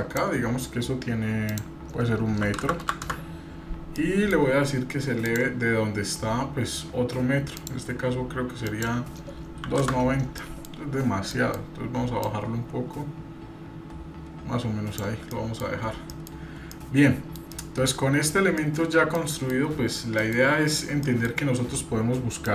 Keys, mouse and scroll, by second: 1.5-3.4 drag, 2.8 KP_0, 3.9-4.3 middle drag, 5.2 click, 7.6-10.0 drag, 10.4 middle click, 11.3 middle click, 12.2-15.1 drag, 15.3-15.6 middle drag, 16.1 middle click, 16.4-16.8 scroll up 2, 16.7-17.4 middle drag, 17.5-17.9 middle drag, 18.1 scroll up 1, 18.6-19.1 middle drag, 19.2 scroll down 1, 19.3 middle drag, 20.2 middle click, 20.5-20.8 scroll up 1, 20.9 shift+middle click.